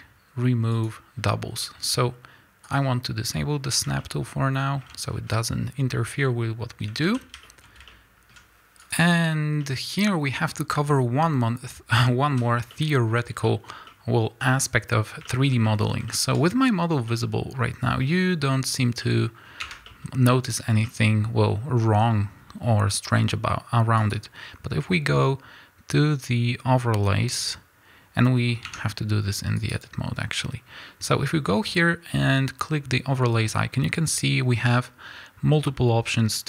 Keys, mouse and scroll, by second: 2.6 click, 3.7 scroll down 1, 4.0-8.4 shift+middle drag, 4.8 scroll down 1, 6.2 scroll up 1, 6.9 a, 8.1 scroll up 1, 8.6-9.6 drag, 9.6-28.7 middle drag, 12.4 z, 13.1 scroll up 2, 19.6 Tab, 21.8-22.4 scroll up 2, 22.4-24.0 scroll down 2, 24.0-28.7 scroll down 1, 28.7 Tab, 28.7-36.4 drag.